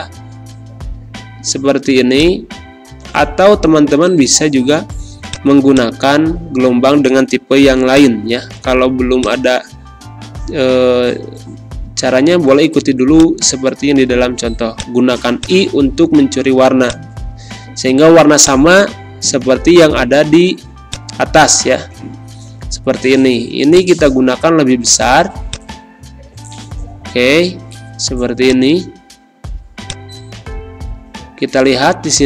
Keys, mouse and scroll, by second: 6.5 Pause, 7.9-12.5 drag, 12.5 shift+i, 13.1-29.6 shift+drag, 29.6 shift+space, 29.8 shift+click, 30.1 shift+space.